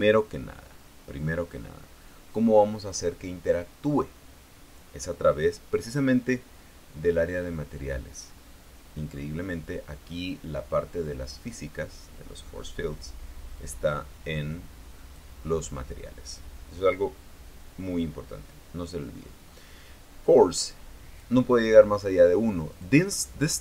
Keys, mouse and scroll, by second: 0.7 scroll down 2, 9.7-10.1 scroll down 2, 10.7-11.0 scroll down 2, 11.7-12.1 scroll down 2, 14.3-16.0 drag, 21.3 click, 23.4 click.